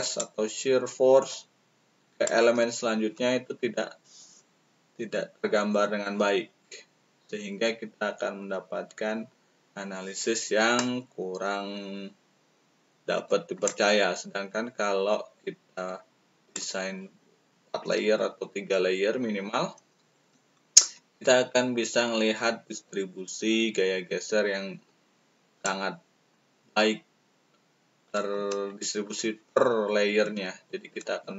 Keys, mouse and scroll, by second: 0.1-2.2 shift+drag, 0.1-2.2 shift+right drag, 13.6-16.6 shift+drag, 16.4 shift+right click, 20.4-21.7 shift+middle drag, 25.6-28.1 shift+drag.